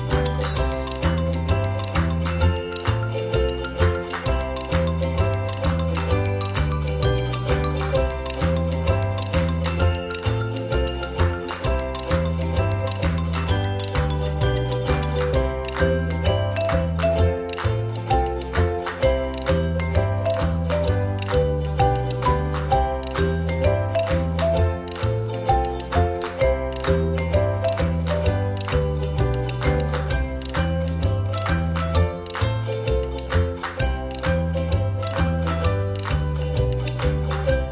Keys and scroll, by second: 24.2 ctrl+z, 24.8 space, 26.1 space, 28.6 space, 31.8 ctrl+z, 34.5 ctrl+c, 34.7 ctrl+shift+f.